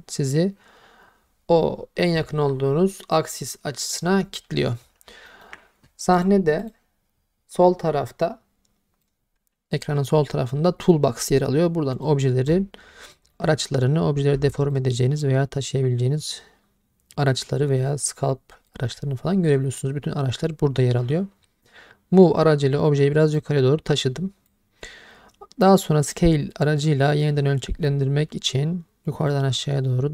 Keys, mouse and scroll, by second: 5.3 shift+middle click, 6.2 click, 6.6 click, 9.0 click, 11.9 click, 13.1 shift+middle drag, 14.7 click, 23.4 click, 26.1 click, 29.3 click.